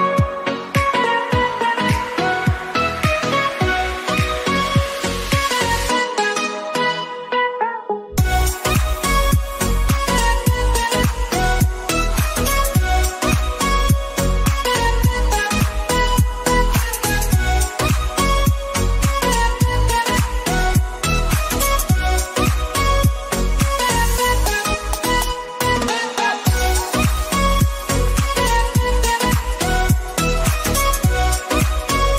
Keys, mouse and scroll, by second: 4.2 click, 8.1 click, 13.3-14.8 drag, 14.8 click, 15.6-16.6 typing, 17.7 alt+Right, 19.4 click, 20.8 click, 22.7 Down, 26.0-27.6 drag, 27.6 Down, 29.1 click, 30.2 alt+click.